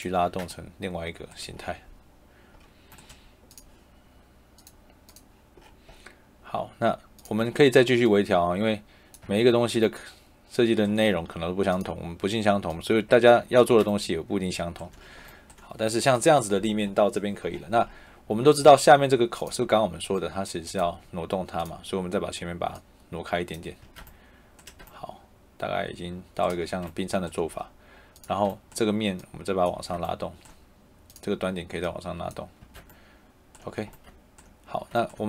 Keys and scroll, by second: 0.1 Escape, 9.1 Escape, 13.6 Escape, 23.7 Escape, 29.7 Escape, 32.5 Escape.